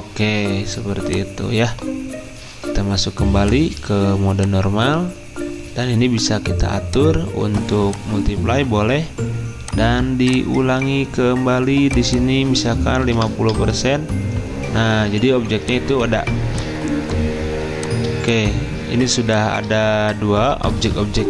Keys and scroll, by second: 13.3-14.0 typing, 16.2 z, 17.6 space, 19.1 space.